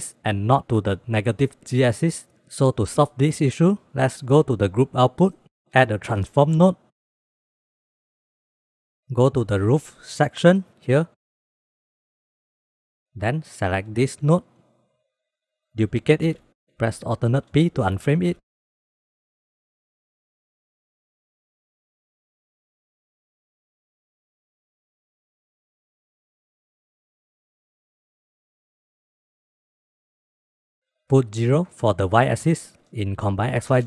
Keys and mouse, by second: 2.9 click, 3.5 click, 4.0 click, 4.9 click, 5.9 shift+a, 9.6 click, 9.9 click, 12.0-12.4 drag, 14.3 shift+click, 14.6 shift+click, 16.1 shift+d, 17.7 alt+p, 19.3 click, 19.9 g, 20.9-21.7 drag, 22.2 click, 22.3 g, 23.1 click, 24.0-24.8 drag, 24.8 g, 26.4 click, 26.9 click, 27.3 g, 28.4 drag, 28.9 g, 30.6 click, 31.6-33.8 drag.